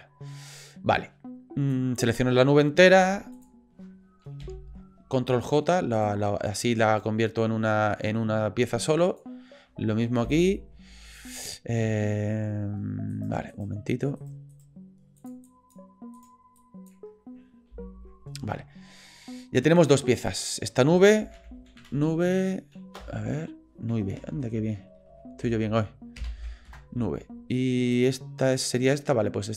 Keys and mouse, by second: 1.8 drag, 2.9 g, 4.4 ctrl+j, 5.4 shift+drag, 6.0 click, 6.8 click, 8.9-9.2 drag, 10.2 ctrl+j, 13.1 drag, 13.5 click, 14.2 shift+click, 14.5 shift+click, 15.2 click, 15.5 drag, 16.2 click, 16.6-16.9 drag, 17.7 ctrl+j, 20.3-27.2 drag, 24.3 Left, 28.4 click.